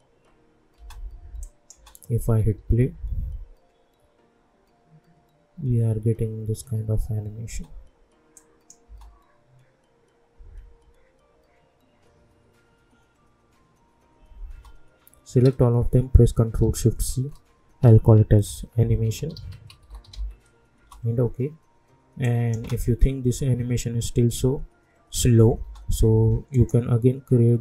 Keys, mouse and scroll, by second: 0.7 space, 1.4 click, 1.8-2.6 typing, 7.4 space, 8.3 click, 8.8 space, 14.5 space, 15.4 ctrl+a, 17.1 ctrl+shift+c, 18.2-20.5 typing, 20.7 Return, 22.2 click, 22.6 space, 25.6 space, 26.5 right click.